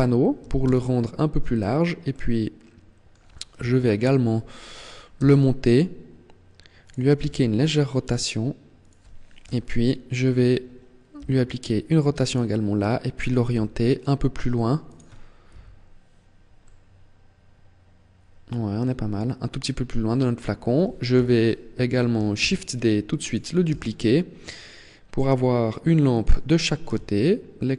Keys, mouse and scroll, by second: 0.1 s, 1.2 click, 1.8 middle click, 3.2 KP_1, 5.0 g, 6.7 click, 6.9 r, 8.6 click, 9.1 KP_7, 9.9-10.3 scroll down 2, 10.8 r, 12.1 click, 13.2 g, 14.6 click, 15.2 KP_1, 16.3 middle click, 20.8 KP_7, 22.0 shift+d, 23.0 click, 23.4 r, 26.0 click, 26.6 g.